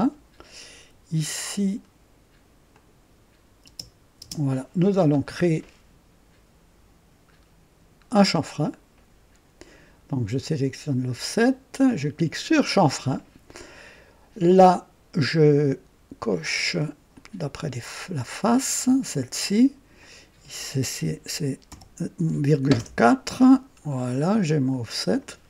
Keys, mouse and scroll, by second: 2.7 click, 3.6 space, 4.1 space, 7.3-7.6 scroll up 1, 8.1 scroll down 2, 12.2 click, 16.2 click, 17.1 click, 18.1 click, 19.9 click, 21.6 ,, 22.1 KP_4, 22.7 KP_Enter, 23.8-24.2 scroll down 2, 24.5-25.3 drag.